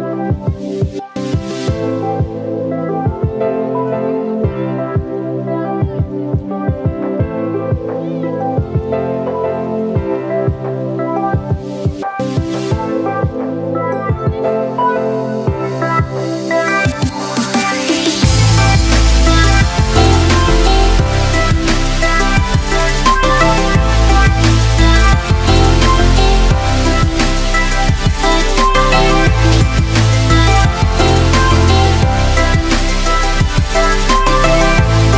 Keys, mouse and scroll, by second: 23.0 shift+space, 23.2 click, 23.5 space, 24.3-31.5 shift+drag, 31.5 space, 31.7 click, 32.0 space, 32.7-34.6 shift+drag.